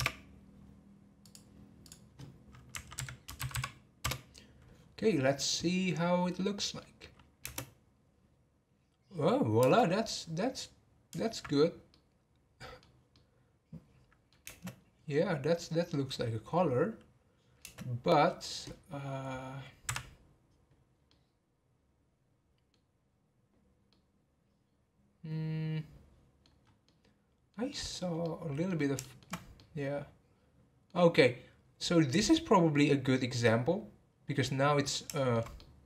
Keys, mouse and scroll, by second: 1.2 click, 1.8-3.5 drag, 3.5 m, 6.5 middle click, 7.4 space, 9.6 space, 10.0-11.5 middle drag, 11.5 scroll up 2, 11.9-14.4 middle drag, 14.4 space, 14.9 scroll down 3, 17.6 space, 20.0 Right, 21.0-23.0 middle drag, 23.0-23.9 scroll up 1, 23.9-26.6 middle drag, 26.6 scroll up 1, 26.8-28.0 middle drag, 28.0 scroll down 2, 28.2-29.3 middle drag, 29.3 scroll up 2, 29.6-32.6 middle drag, 34.1 scroll down 1, 34.4-35.8 middle drag.